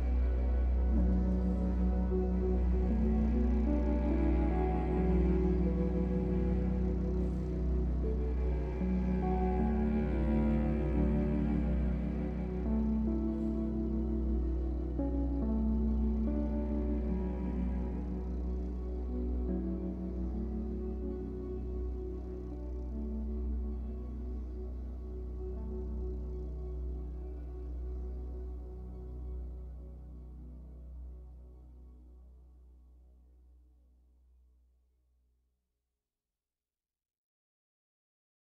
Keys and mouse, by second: 2.3-2.7 typing, 3.8 click, 6.5-7.6 drag, 8.4 click, 9.9 space, 10.5 space, 11.7 click, 12.8 click, 16.5 space, 17.2-20.6 drag, 21.8 space, 23.2 click, 24.3 click, 24.7 space, 26.9 space, 27.2-28.7 alt+drag, 29.7 click, 34.2 click, 35.1 click, 36.1-38.5 shift+drag.